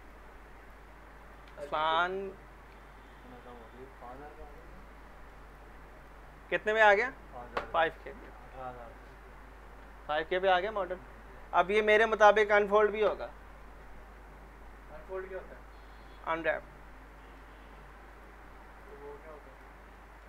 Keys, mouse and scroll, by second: 0.0 click, 0.9 scroll down 1, 1.2 click, 1.5 z, 1.7 middle click, 2.8 alt+middle click, 4.1 click, 4.8-5.4 alt+middle click, 5.5 click, 17.1 middle click, 18.1 click, 19.9 alt+middle click.